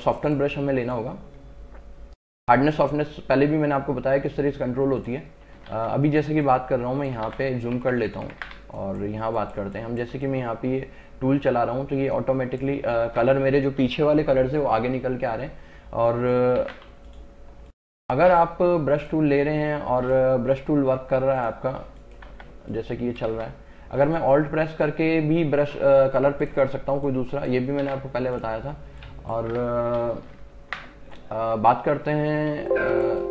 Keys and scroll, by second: 5.8 ctrl+alt+z, 7.3 ctrl+alt+z, 7.8 ctrl+KP_Add, 8.7 space, 13.1 ctrl+alt+z, 16.7 ctrl+alt+z, 22.4 Return, 23.4 ctrl+z, 27.9 ctrl+alt+z, 29.6 Return, 32.6 space.